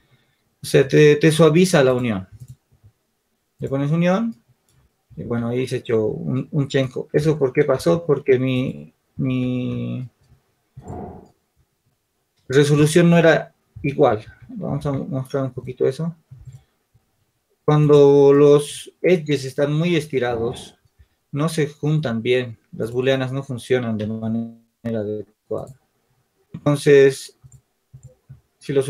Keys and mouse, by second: 1.9-3.5 drag, 4.5 click, 5.3 ctrl+z, 7.9 Tab, 9.1 ctrl+z, 10.9 click, 15.3 shift+z, 16.6-17.8 drag, 16.8 shift+z, 25.1 Tab, 26.4 ctrl+r.